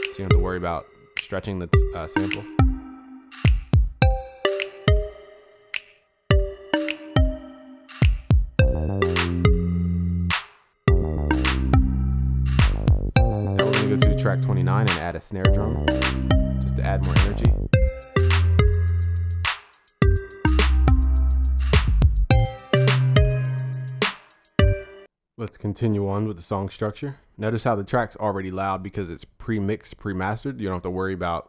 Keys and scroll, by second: 17.1 ctrl+z.